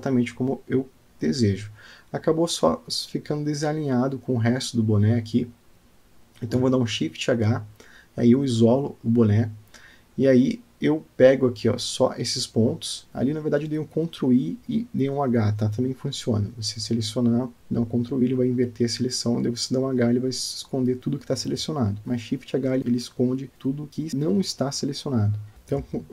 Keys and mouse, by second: 3.7 Tab, 5.5-6.7 middle drag, 7.6 Tab, 8.7 ctrl+i, 9.5 h, 10.2 drag, 10.5 click, 11.7 Tab, 13.8 click, 14.5 click, 14.8 click, 15.9 alt+middle click, 17.0 click, 18.8 g, 21.0 Tab, 21.3-22.4 middle drag, 22.8-25.5 middle drag, 25.5 Tab.